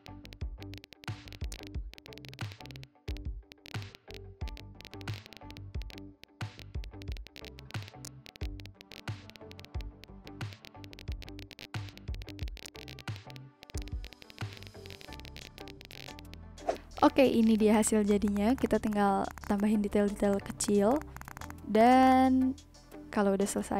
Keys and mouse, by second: 0.0 click, 0.2 click, 0.6 click, 1.0 click, 1.1 Right, 1.2 Up, 1.2 click, 1.4 click, 1.8 Up, 1.9 click, 2.1 Up, 2.4 Right, 2.5 Up, 2.5 Down, 2.7 Left, 3.0 b, 3.1 click, 3.5 click, 3.8 Delete, 4.1 click, 4.3 click, 4.6 ctrl+z, 4.6 click, 4.7 ctrl+z, 4.8 click, 4.9 click, 5.2 click, 5.5 click, 5.7 click, 5.9 click, 6.1 click, 6.3 b, 6.6 click, 6.8 click, 7.0 click, 7.1 click, 7.6 click, 7.7 click, 8.0 click, 8.2 b, 8.2 click, 8.3 z, 8.4 click, 8.6 click, 8.8 click, 8.9 click, 9.2 click, 9.4 click, 9.5 click, 10.0 ctrl+z, 10.1 click, 10.2 click, 10.6 click, 10.7 b, 10.8 click, 10.9 click, 11.2 click, 12.1 click, 12.4 click, 13.1 click, 13.4 click, 13.6 click, 13.8 z, 13.8 click, 14.0 click, 14.2 click, 14.3 ctrl+z, 14.8 click, 15.0 click, 15.1 ctrl+z, 15.3 click, 15.6 click, 17.0 click, 17.3 click, 17.7 click, 18.1 click, 18.8 click, 19.2 click, 19.8 ctrl+z, 20.0 ctrl+z, 20.3 click, 20.5 click, 21.7 click.